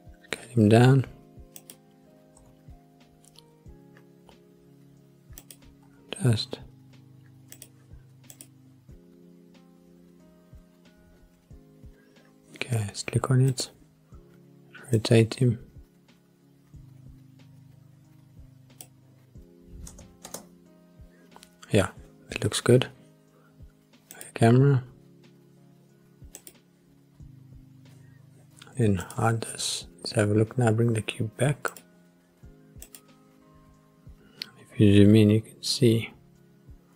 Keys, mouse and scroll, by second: 1.6 click, 2.4 g, 5.4 click, 5.8 s, 7.5 click, 8.3 click, 9.2-9.9 scroll up 1, 9.9-10.5 scroll down 2, 10.5-11.9 scroll up 5, 11.9 scroll down 1, 13.5 click, 14.9 click, 19.9 space, 20.2 space, 22.4-22.8 scroll down 2, 24.1 click, 24.9-25.3 scroll up 2, 25.3-26.4 scroll down 2, 26.4 click, 27.0-28.2 scroll down 3, 29.0 click, 31.7 click, 33.2 click, 34.2-34.8 scroll up 3, 36.3-36.7 scroll down 4.